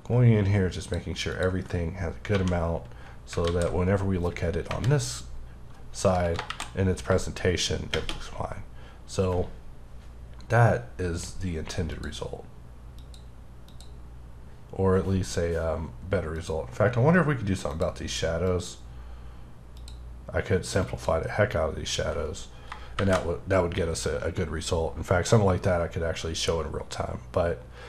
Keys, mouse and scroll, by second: 0.8 click, 1.3 click, 2.3 1, 4.6 KP_0, 6.4 shift+Left, 16.3 click, 22.9 Left.